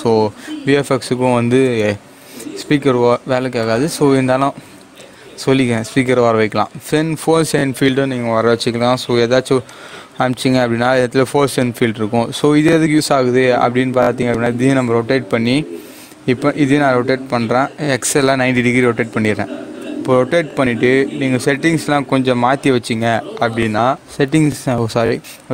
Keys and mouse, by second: 4.9 shift+a, 9.6 click, 12.3 g, 14.4 click, 15.7 r, 18.2-19.5 typing, 19.7 Return.